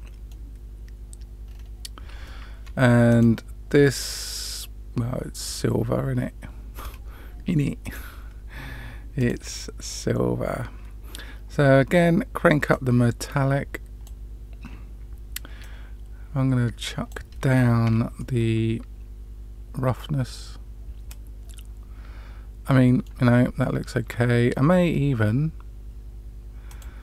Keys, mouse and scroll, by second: 1.4-2.2 scroll down 3, 2.2 middle click, 3.0 click, 7.8 click, 9.1 click, 12.6-14.0 drag, 15.5-17.0 drag, 18.1-23.0 middle drag, 26.6 click.